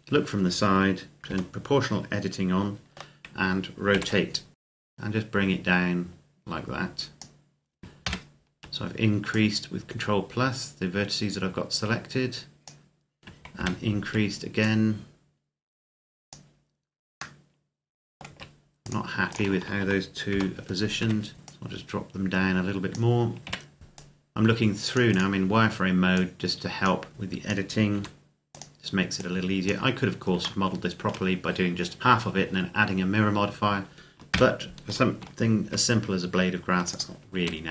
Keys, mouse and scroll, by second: 1.1 o, 3.7 r, 4.5-4.8 scroll down 1, 4.8 click, 7.8 ctrl+KP_Add, 9.1 click, 13.4 ctrl+KP_Add, 14.4 click, 17.2 middle click, 18.1 z, 18.6 right click, 19.0 shift+right click, 20.1 o, 20.8 KP_1, 21.3 click, 23.4 c, 23.7 click, 24.9 right click, 25.9 click, 27.7 r, 28.3 click, 30.4 shift+middle click, 34.1 ctrl+KP_Add, 35.4 g, 36.7 click, 37.2 r.